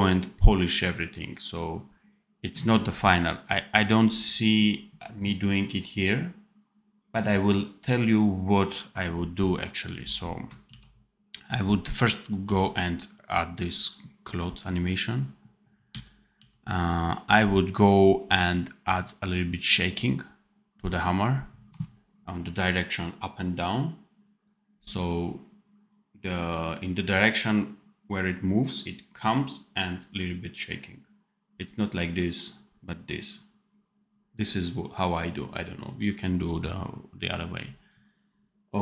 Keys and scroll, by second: 10.6 ctrl+s, 12.3 d, 15.8 d.